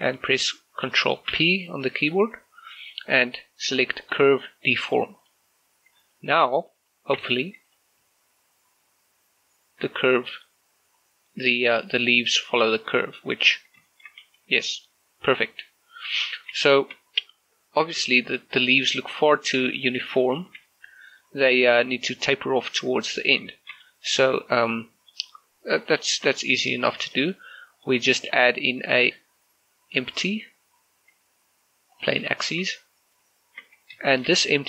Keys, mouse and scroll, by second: 1.4 ctrl+p, 5.3 click, 6.2 shift+middle click, 6.9 right click, 7.2 Tab, 7.7 right click, 8.1 g, 10.9 right click, 11.6 g, 13.1 right click, 13.5-13.9 scroll down 1, 13.9 shift+middle click, 14.3 g, 16.1 right click, 16.4 scroll up 1, 16.7 shift+middle click, 18.9 Tab, 19.2 middle click, 19.3 middle click, 19.5 z, 20.0 shift+middle click, 20.2 right click, 20.5 a, 20.7 middle click, 21.5 right click, 23.6 shift+middle click, 23.9-27.0 middle drag, 27.5 middle click, 28.0 scroll up 1, 28.3 shift+a, 32.0 click, 32.5 shift+middle click, 32.7 scroll up 1, 33.5 shift+middle click, 34.1 shift+middle click.